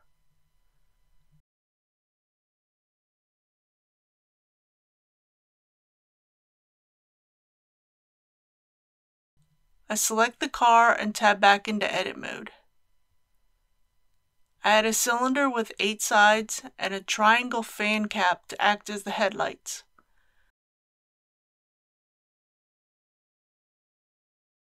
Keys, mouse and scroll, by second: 0.9 middle click, 2.3 shift+middle click, 3.3-6.6 middle drag, 6.6-7.1 scroll up 1, 7.2-8.1 scroll down 1, 9.7 click, 10.7 Tab, 14.3 shift+a, 16.7 click, 19.5 KP_8, 19.9 Tab, 21.0 click.